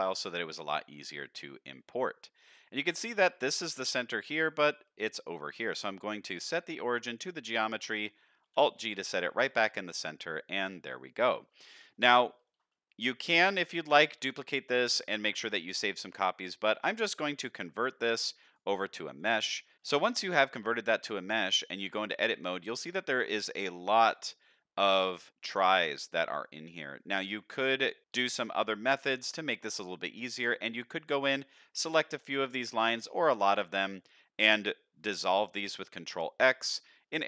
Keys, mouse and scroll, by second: 5.4-7.9 right drag, 8.4 alt+g, 9.1-9.4 shift+middle drag, 10.9-11.5 middle drag, 11.8-12.2 scroll up 2, 12.2 middle click, 12.7 middle drag, 13.1-13.8 scroll down 3, 13.9 shift+middle drag, 16.9-19.6 right drag, 19.6 middle drag, 19.7 Tab, 19.7 scroll down 3, 19.8 shift+middle drag, 20.3 middle drag, 21.3 Tab, 21.7-22.2 scroll up 4, 22.5 shift+middle click, 23.7 click, 24.1 click, 25.6 click, 26.2 click, 26.6-27.7 scroll down 4, 27.4 middle click, 28.0 shift+middle click, 28.5 middle click, 30.2 shift+middle click, 30.7-31.5 scroll up 4, 31.5 click, 31.5 scroll up 1, 32.0 shift+middle click, 32.5-32.9 scroll down 2, 33.0 shift+middle click, 33.6 click, 35.8 ctrl+x, 36.7 click.